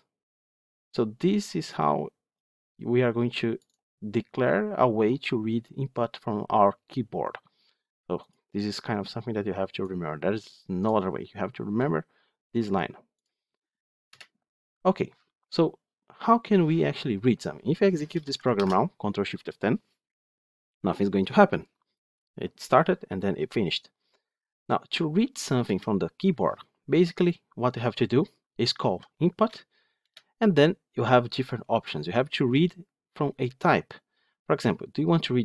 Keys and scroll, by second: 18.4 ctrl+shift+F10, 29.9 Return.